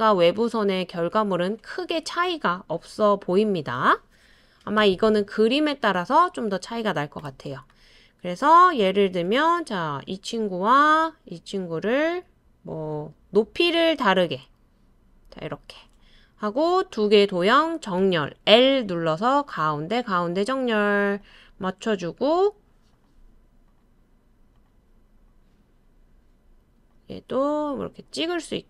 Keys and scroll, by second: 4.8 BackSpace, 18.0 |.